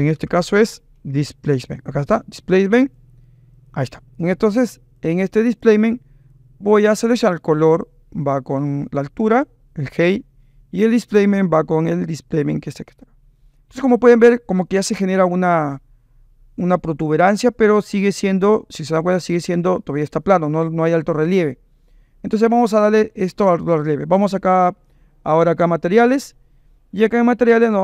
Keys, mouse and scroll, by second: 0.1 BackSpace, 4.6 click, 5.6 click, 7.7-9.4 drag, 11.5 click, 17.4-18.3 drag, 19.0-21.4 middle drag.